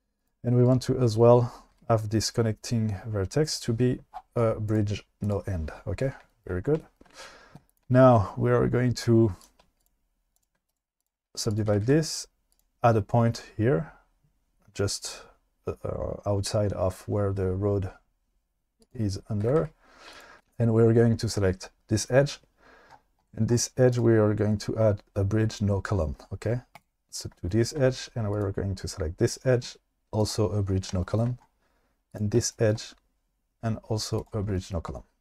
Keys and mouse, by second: 1.7 g, 3.5 click, 4.7 click, 7.7 click, 9.8 shift+click, 10.7 right click, 11.7 g, 11.8 g, 12.5 click, 18.8 click, 19.4 g, 19.6 g, 20.1 click, 20.4 2, 24.0 click, 28.3 click, 30.2 click.